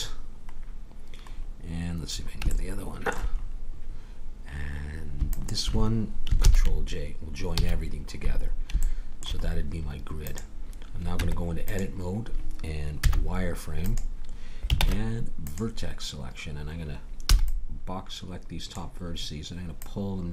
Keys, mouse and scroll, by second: 1.3 middle click, 2.9 middle click, 6.4 ctrl+j, 7.6 a, 10.2-11.9 drag, 11.1 Tab, 13.0 z, 14.8 ctrl+Tab, 17.3 b, 19.7-20.3 drag.